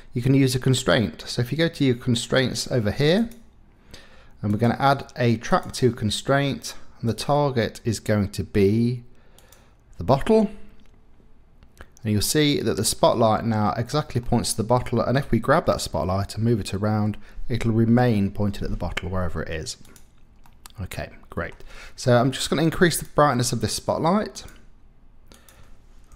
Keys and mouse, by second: 4.5-5.7 drag, 12.2 middle click, 14.3 middle click, 15.3 g, 19.8 Escape, 19.8 middle click, 20.5 middle click, 21.4 click, 22.8 click, 24.3 click, 25.3-26.1 drag.